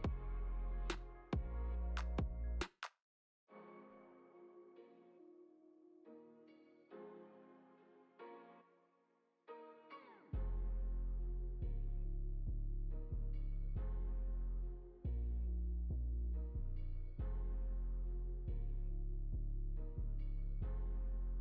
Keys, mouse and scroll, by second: 0.9 g, 2.9 middle click, 3.8 click, 4.9 g, 12.5 shift+d, 15.2 scroll up 3, 15.5 shift+middle click, 15.9 scroll up 2, 16.2 shift+middle click, 17.1 g, 20.5 g.